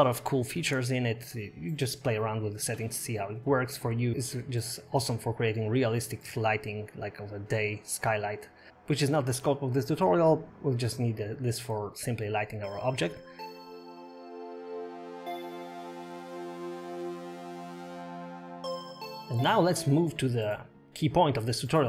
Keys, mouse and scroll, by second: 0.3 click, 3.4 click, 4.3 click, 5.2 click, 6.1 click, 9.1 click, 11.1 click, 12.4-12.7 scroll up 4, 13.0-13.3 scroll down 8.